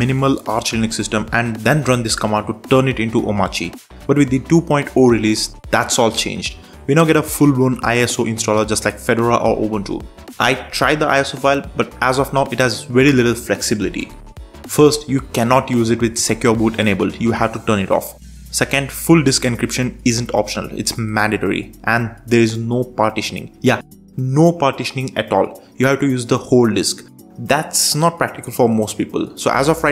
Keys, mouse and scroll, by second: 1.5 super+4, 2.2 super+space, 3.0 Down, 3.1 Down, 3.3 Down, 3.4 Down, 3.5 Up, 3.7 Up, 3.8 Up, 4.4 Escape, 6.4 ctrl+shift+super+space, 7.1 Down, 7.2 Down, 7.4 Down, 7.5 Down, 7.6 Down, 7.7 Down, 8.3 Return, 11.4 super+3, 13.5 super+4, 14.6 super+space, 15.2 Down, 15.5 Up, 15.7 Down, 16.0 Up, 17.5 Escape, 18.6 ctrl+shift+super+space, 19.2 Down, 19.4 Down, 19.5 Down, 19.6 Down, 19.7 Down, 19.9 Down, 20.4 Return, 22.5 super+3, 28.0 super+4.